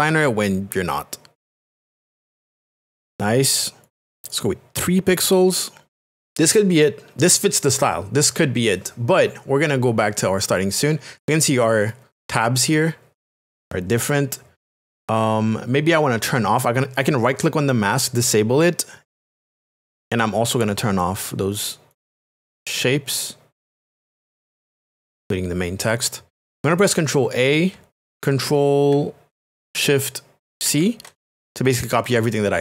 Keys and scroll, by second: 27.2 ctrl+a.